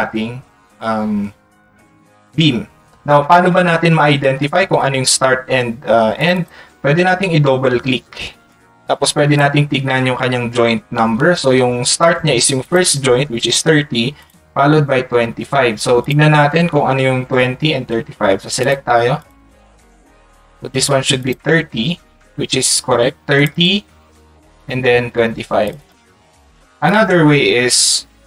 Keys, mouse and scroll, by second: 6.3 click, 25.8 click, 26.9 click.